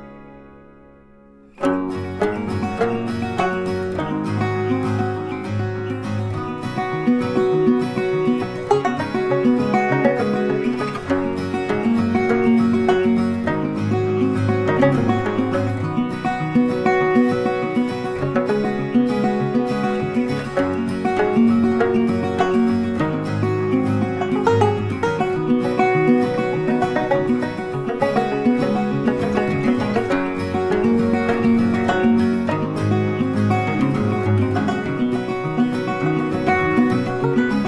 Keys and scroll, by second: 9.5 ctrl+t.